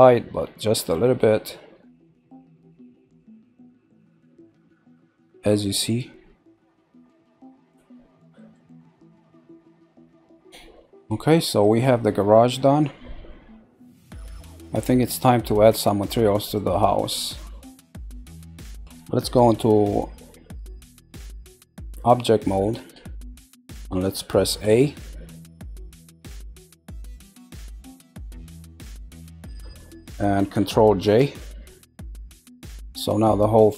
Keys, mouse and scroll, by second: 2.7-4.0 middle drag, 4.6-6.8 shift+middle drag, 7.6-8.7 middle drag, 9.2-10.3 middle drag, 10.9 middle click, 11.9-12.3 scroll, 12.3-14.1 middle drag, 14.1-14.8 scroll, 14.8 middle click, 15.5-16.0 scroll, 16.4 click, 17.0 scroll down 1, 17.8 middle click, 18.3 scroll down 2, 18.8-21.6 middle drag, 22.7 Tab, 24.6 a, 25.4-26.5 middle drag, 26.5 scroll down 2, 27.4 scroll down 8, 27.6-28.9 scroll up 16, 28.9-31.2 middle drag, 31.2 ctrl+j, 31.9 scroll down 1, 32.3-33.3 middle drag, 33.3 scroll up 4.